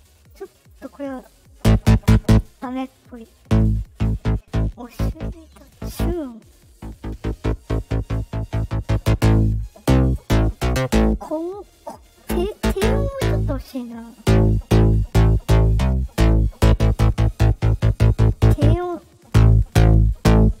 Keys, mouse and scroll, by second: 0.1 click, 0.5 right click, 1.1 click, 18.9-20.6 drag.